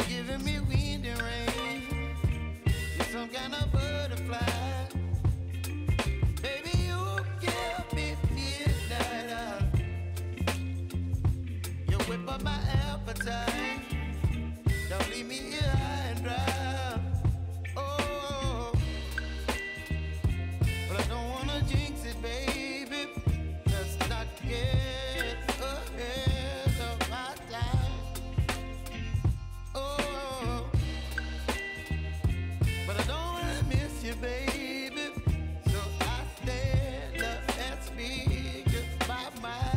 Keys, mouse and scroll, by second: 3.0-3.9 typing, 3.9 Return, 5.0 ctrl+s, 6.1 -, 7.2-8.8 scroll down 1, 8.8 click, 9.7 t, 10.6 click, 11.7 n, 12.2-12.9 scroll up 1, 12.9 click, 13.1 2, 13.7-14.2 scroll down 1, 14.2 click, 16.3-17.0 scroll down 1, 17.0 click, 20.1-23.8 typing, 27.1-39.7 drag.